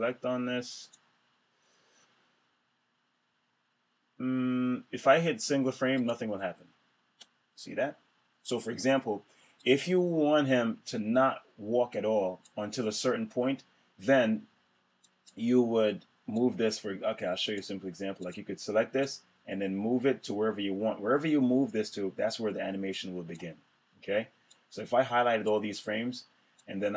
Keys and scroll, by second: 6.8 Return.